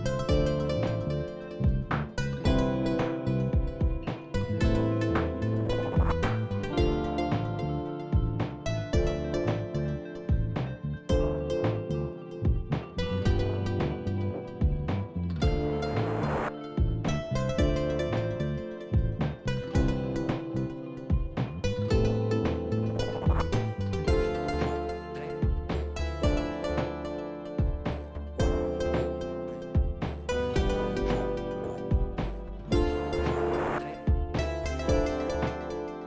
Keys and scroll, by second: 2.1 Tab, 4.8 shift+d, 6.3 p, 8.0 Tab, 10.5 KP_1, 21.5 Tab, 22.4 a, 23.5 e, 28.6 shift+z, 35.2 ctrl+r.